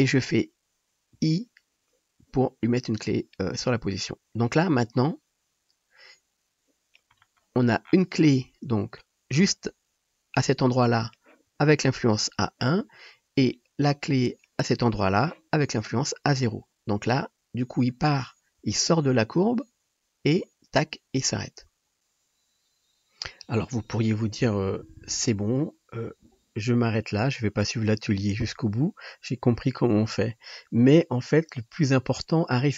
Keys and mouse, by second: 1.2 i, 22.0-32.7 middle drag, 25.4-32.7 drag, 25.4-32.7 right drag.